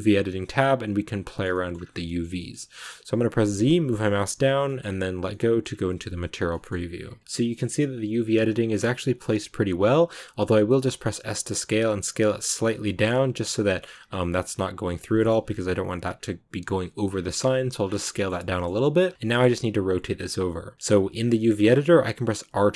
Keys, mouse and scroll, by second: 1.2 shift+middle click, 1.6-1.9 scroll up 2, 1.9-4.1 middle drag, 4.1 z, 4.5 shift+middle click, 4.7-5.2 scroll up 1, 5.2-6.2 middle drag, 6.2 z, 6.4-11.1 middle drag, 11.1 s, 18.9 scroll down 1, 19.0-22.2 middle drag, 22.2 r.